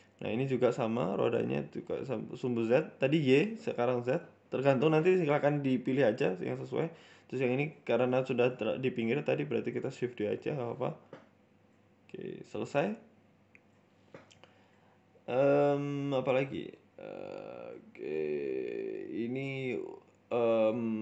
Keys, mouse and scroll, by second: 0.0 click, 0.3 middle click, 1.1 click, 1.4 click, 1.5-2.1 scroll down 3, 1.9 shift+middle click, 2.1 middle click, 2.7 right click, 2.9 middle click, 3.5 KP_1, 4.1 ctrl+KP_3, 4.8 Tab, 5.5 a, 5.9 shift+d, 8.6 middle click, 8.9 Tab, 9.0 middle click, 9.4 scroll down 8, 9.6 middle click, 10.1-10.7 scroll up 8, 10.7 middle click, 11.9 scroll down 3, 12.1 middle click, 12.4 scroll up 3, 12.5 shift+middle click, 12.8 middle click, 14.8 shift+middle click, 15.1 middle click, 15.8 KP_1, 16.1 shift+a, 18.0 shift+middle click, 18.3 g, 19.1 shift+middle click, 19.6 g, 20.1 s, 20.9 shift+middle click.